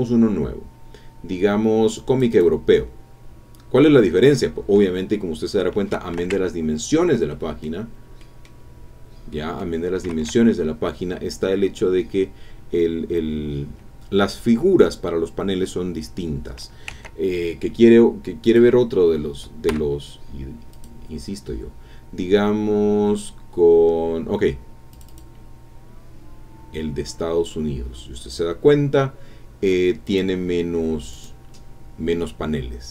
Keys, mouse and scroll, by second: 2.0 click, 6.3 ctrl+Tab, 7.3 click, 7.8 scroll up 2, 8.2 click, 8.6 scroll down 2, 9.3 click, 10.1 ctrl+Tab, 18.4 click, 19.7 Escape, 20.7 click, 24.9 click, 30.0 click, 31.1 click.